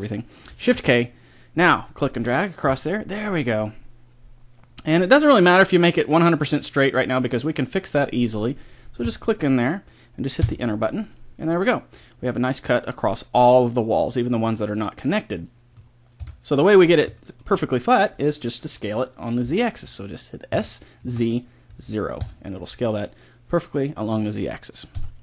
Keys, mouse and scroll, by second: 0.6 shift+k, 12.2-14.0 middle drag, 14.4-19.3 middle drag, 16.2 KP_1, 20.5 s, 23.1-24.9 middle drag, 24.9 KP_1.